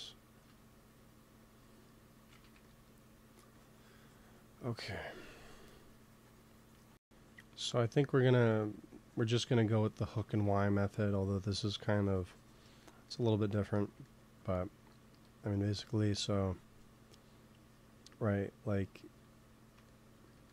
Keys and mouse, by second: 2.2 shift+c, 2.5 f, 12.7 middle click, 15.6-18.6 drag.